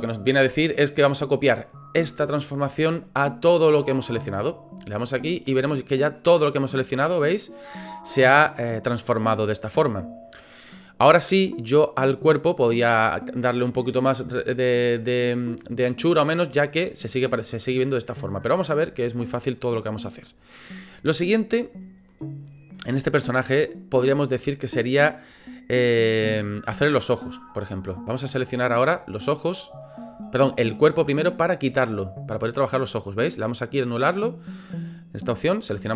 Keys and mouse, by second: 6.1-7.7 middle drag, 8.6-10.9 middle drag, 16.9 click, 17.4-18.4 middle drag, 19.2-20.3 middle drag, 21.2 middle click, 22.1 middle click, 29.6 right click, 32.3 right click.